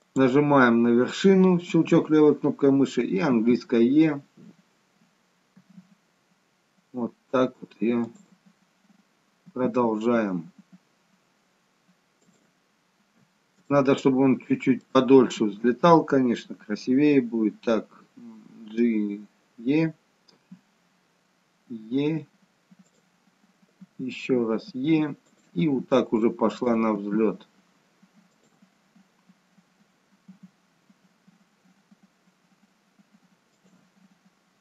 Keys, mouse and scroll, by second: 5.6 e, 8.5-9.4 scroll down 1, 9.4-11.9 scroll down 2, 9.4 e, 12.8-13.6 scroll down 1, 13.6 scroll down 1, 13.7 shift+middle click, 25.6 e, 26.9 e, 34.0-34.6 scroll down 1.